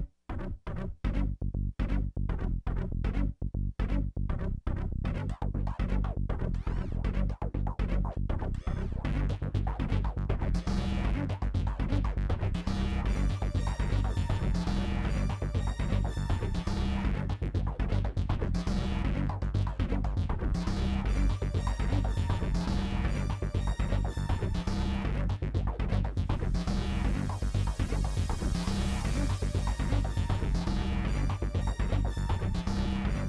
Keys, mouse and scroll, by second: 0.3 scroll up 1, 0.5 shift+middle click, 1.0 g, 1.9 g, 2.6 click, 3.1 g, 3.5 click, 4.0 g, 4.5 click, 4.9 g, 5.4 middle click, 5.6 scroll down 3, 5.7 middle click, 6.6 click, 6.7 middle click, 9.3 click, 9.9 click, 10.3 middle click, 11.0 click, 11.6 scroll up 1, 11.7 middle click, 14.5 click, 15.4 middle click, 17.9 click, 18.4 scroll up 3, 18.5 scroll down 1, 18.7 click, 19.6 g, 20.4 g, 21.4 click, 22.4 click, 23.1 middle click, 23.3 scroll down 4, 23.5 middle click, 25.9 ctrl+s, 26.9 middle click, 27.6 middle click, 28.2 scroll up 1, 28.4-29.6 middle drag, 30.4-31.9 middle drag, 31.9 click, 32.8-33.2 scroll up 1.